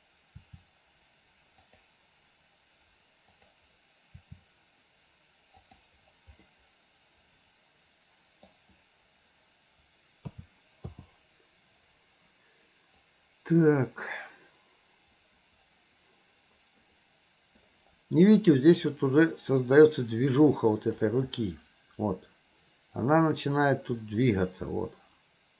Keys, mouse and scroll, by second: 3.3 click, 4.3 r, 6.5-8.5 middle drag, 8.5-10.4 scroll down 1, 10.4 a, 11.0 i, 13.1-21.1 drag, 23.1-25.5 drag.